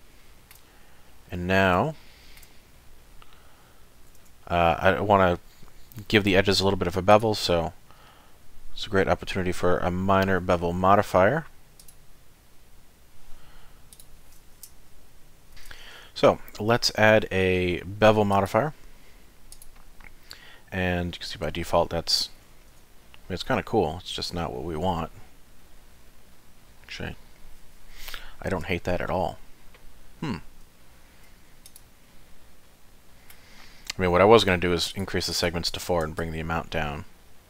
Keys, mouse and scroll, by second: 0.1 shift+middle click, 0.6 scroll down 2, 1.1 middle click, 1.9 shift+middle click, 2.7 middle click, 3.5 scroll up 1, 4.2 Tab, 4.7 middle click, 7.1 click, 13.9 click, 15.5 ctrl+., 18.3 click, 20.8 middle click, 22.4-22.7 scroll down 1, 22.7 Tab, 23.0 middle click, 23.4 Tab, 24.1 middle click, 30.8 shift+middle click, 31.7 click, 32.1 middle click, 34.9 click, 35.3 click, 36.2 shift+click.